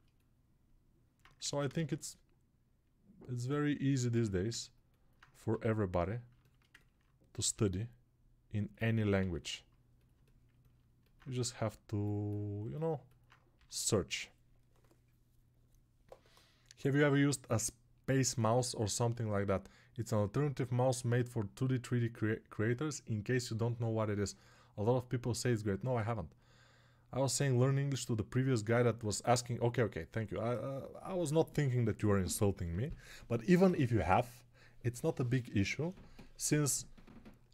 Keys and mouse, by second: 1.3 ctrl+Tab, 1.6 shift+a, 4.0 Tab, 5.4 g, 6.1-37.5 alt+shift+middle drag, 7.6 s, 9.1 g.